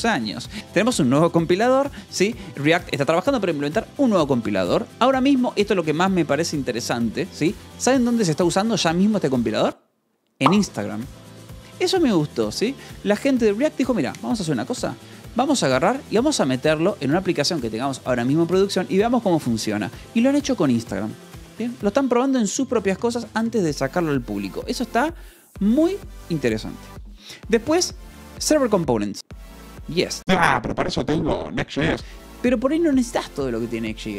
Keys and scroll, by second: 0.6 k, 2.1 l, 26.2-27.1 typing, 29.2 shift+v, 29.8 Escape, 31.9 Escape.